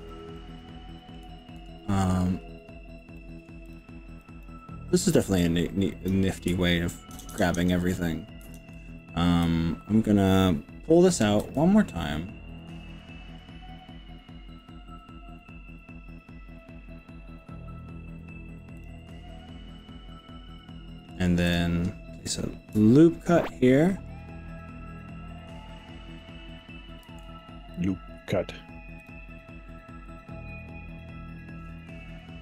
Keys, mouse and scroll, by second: 0.4 middle click, 3.2 middle click, 3.8 click, 4.4 click, 5.4-6.2 drag, 7.2 ctrl+KP_Add, 7.3 ctrl+KP_Add, 8.4 ctrl+KP_Add, 9.5-10.4 middle drag, 11.6 g, 13.4-13.8 scroll down 2, 14.0-15.0 scroll up 5, 15.4 scroll up 2, 16.0 scroll up 1, 16.6-17.0 scroll down 2, 17.2 scroll up 1, 18.8 click, 19.2 middle click, 20.2 middle click, 20.6-21.2 middle drag, 21.6 click, 22.7 ctrl+click, 27.0 ctrl+r, 29.2 click, 29.8-32.4 drag.